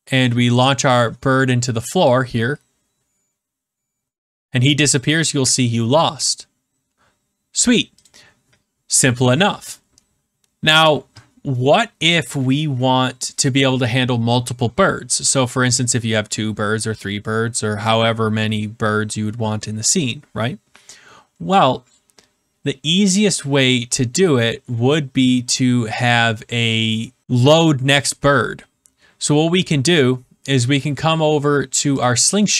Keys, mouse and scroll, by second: 1.0 click, 8.0 click, 32.0 click.